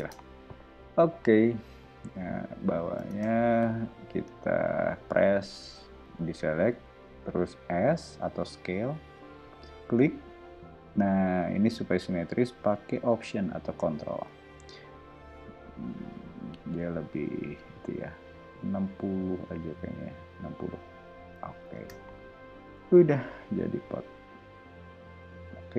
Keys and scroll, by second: 1.9 o, 3.1 space, 7.9 s, 21.7 space, 22.9 o.